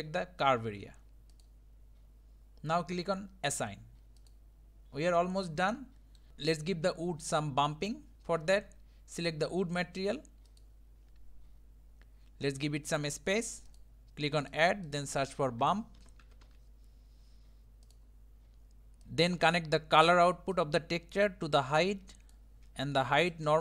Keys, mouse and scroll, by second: 4.3 click, 4.8-5.4 scroll down 4, 5.4-6.3 middle drag, 6.3 scroll up 2, 6.3 scroll down 1, 6.7 scroll up 2, 8.1 scroll down 3, 8.2 scroll up 1, 9.0-10.4 scroll up 1, 10.5 click, 19.0-20.5 shift+middle drag, 20.5-22.3 drag.